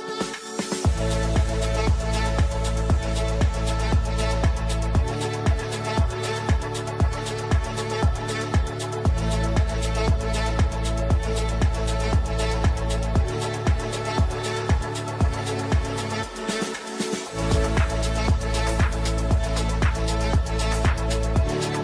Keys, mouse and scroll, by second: 0.3-2.4 drag, 2.6 click, 4.8-13.7 drag, 18.4-19.6 typing.